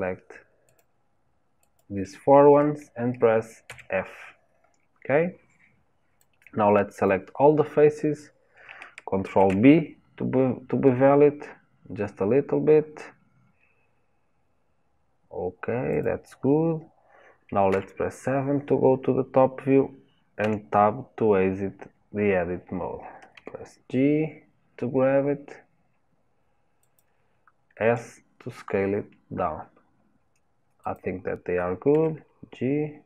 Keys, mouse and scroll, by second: 0.8 shift+click, 1.8 shift+click, 3.7 f, 7.1 click, 9.3 ctrl+b, 17.7 KP_7, 20.4 Tab, 23.4 g, 27.9 s, 32.0 g.